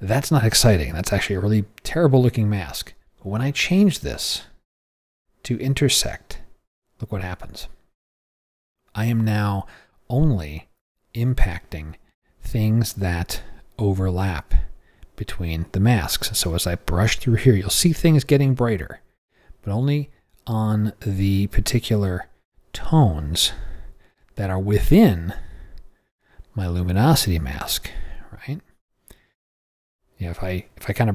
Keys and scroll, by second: 11.3 o.